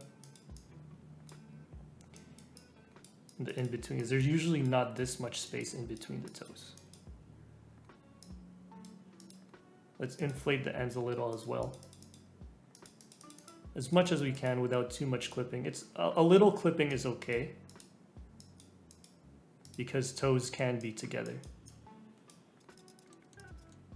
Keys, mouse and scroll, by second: 22.6 click, 23.0 middle click, 23.1 scroll down 2, 23.2 middle click, 23.4 click, 23.6 middle click, 23.7 scroll down 2.